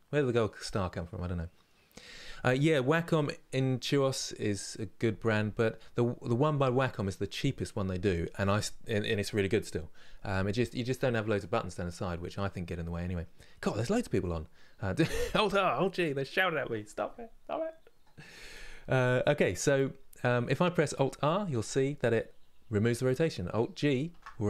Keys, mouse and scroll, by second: 21.2 alt+r, 21.8-23.8 middle drag, 23.8 alt+g.